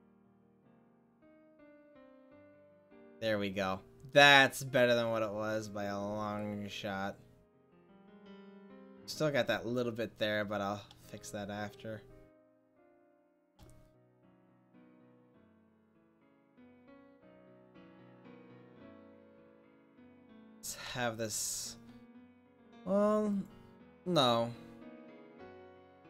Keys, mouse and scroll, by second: 6.4 middle click, 7.0 click, 9.5 middle click, 10.6 middle click, 14.8-19.2 middle drag, 20.5 middle drag, 20.9 middle click, 24.5 click, 25.6-26.0 middle drag.